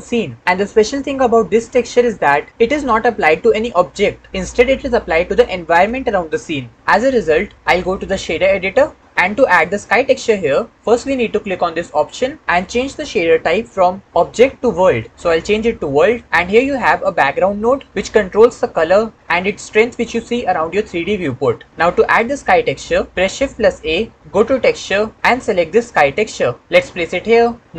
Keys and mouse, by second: 11.8-15.8 drag, 16.2 click, 16.9-23.6 middle drag, 23.6 shift+a.